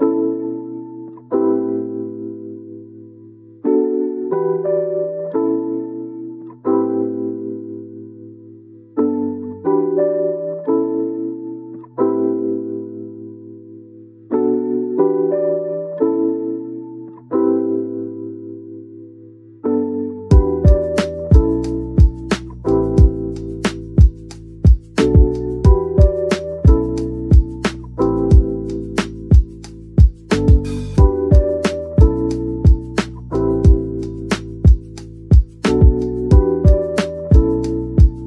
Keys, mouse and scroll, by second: 0.7 Tab, 1.0 scroll down 1, 1.6 middle click, 4.3-5.0 scroll down 1, 5.4 middle click, 9.9 shift+right click, 10.3 typing, 12.6-17.9 typing, 17.0 Return, 19.4 typing, 20.5 middle click, 21.8 typing, 23.8 typing, 25.6 middle click, 26.6-27.6 typing, 28.6 scroll, 28.7-29.4 scroll up 1, 29.2-30.4 typing, 32.6 typing, 34.0-34.7 scroll down 1, 34.7-35.5 typing, 36.7-37.4 scroll up 1, 37.4-37.8 typing.